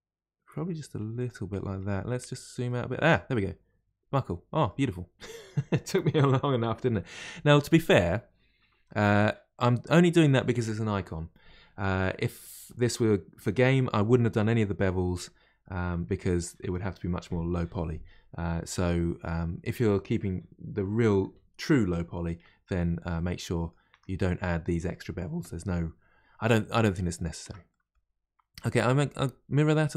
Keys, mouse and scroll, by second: 1.5 middle click, 2.0-2.3 scroll down 1, 2.7 middle click, 3.0 Tab, 3.3-6.4 middle drag, 7.2-7.6 middle drag, 7.6-9.2 scroll up 6, 9.2-12.2 scroll down 1, 22.7-23.1 scroll down 1, 23.1-23.9 middle drag, 23.9 Tab, 26.9 middle click, 27.4 Tab, 27.7 middle click, 28.2-28.6 scroll down 1, 28.6-29.9 middle drag.